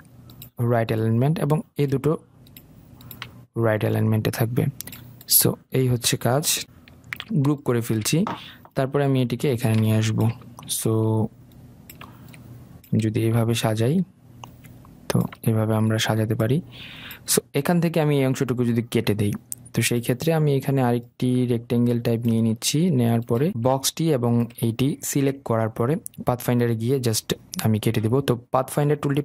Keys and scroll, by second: 7.6 ctrl+g.